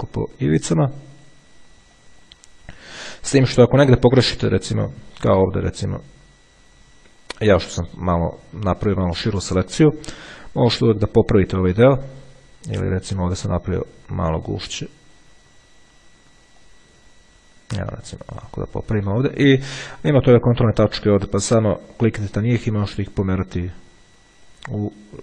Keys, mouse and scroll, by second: 0.7 click, 2.2 click, 3.3 click, 5.2 ctrl+scroll up 2, 13.7-15.9 drag, 16.8-18.5 drag, 21.9-25.2 drag.